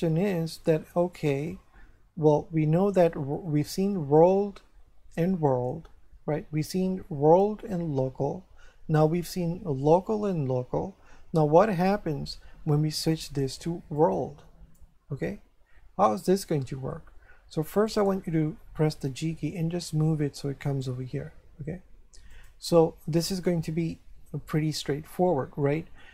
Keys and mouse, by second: 13.1 click, 17.9 right click, 19.0 g, 22.3 click, 23.4 shift+middle click, 25.6 shift+middle click.